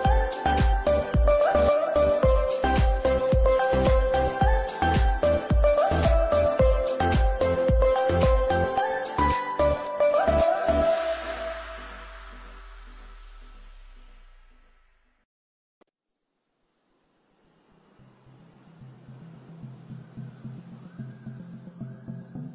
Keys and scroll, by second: 0.7 Escape, 8.1 space, 8.7 Escape, 9.0 F3, 9.4 F2, 14.0 Escape, 17.5 t, 17.8 m, 17.9 e, 18.0 Return.